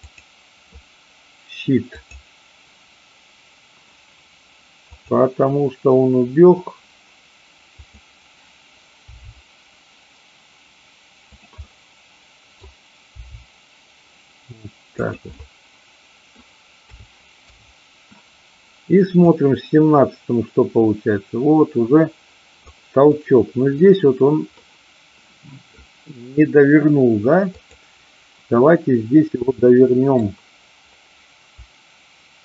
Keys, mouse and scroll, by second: 0.0 click, 2.0 click, 4.9 click, 7.8 click, 9.0 g, 11.4 click, 11.5-12.5 middle drag, 12.5-13.2 scroll down 1, 13.2 g, 14.9 click, 15.4-16.3 middle drag, 17.4 i, 19.3-22.6 drag, 23.0-23.8 middle drag, 24.6-25.8 middle drag, 27.4-28.5 drag, 29.4-30.3 middle drag.